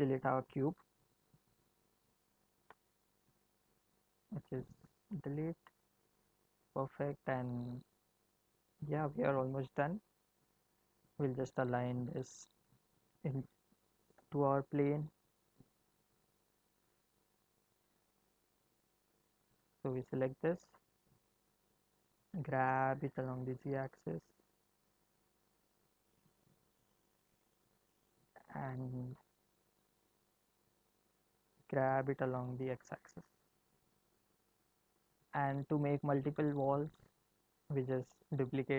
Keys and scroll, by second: 14.1 g, 18.8 End, 22.3 g, 31.5 g.